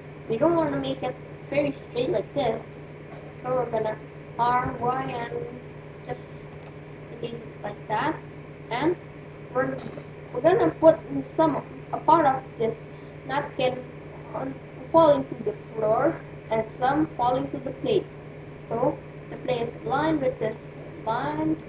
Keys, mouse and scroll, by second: 4.2 r.